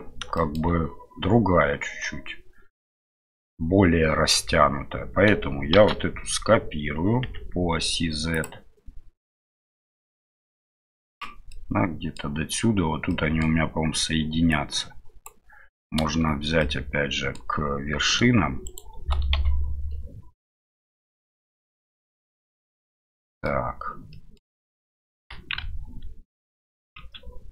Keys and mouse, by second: 0.3 shift+middle drag, 5.7 shift+d, 9.7 shift+middle click, 10.7 click, 11.6 middle click, 13.2 middle click, 14.5 click, 16.7 middle click, 19.3 KP_Divide, 21.0-21.4 middle drag, 22.2 right click, 23.0 middle click, 24.1 middle click, 25.2 g.